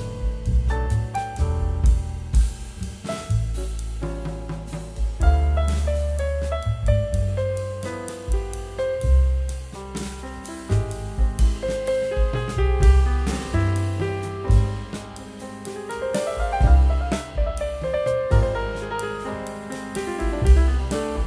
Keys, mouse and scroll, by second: 2.4 ctrl+v, 4.4 v, 8.5 a, 13.8 space.